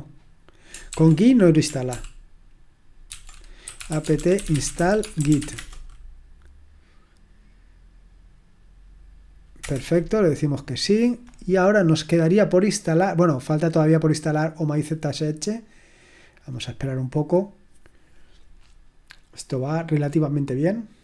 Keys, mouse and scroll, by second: 0.9 ctrl+p, 1.9 ctrl+p, 3.1 ctrl+c, 3.4-5.8 typing.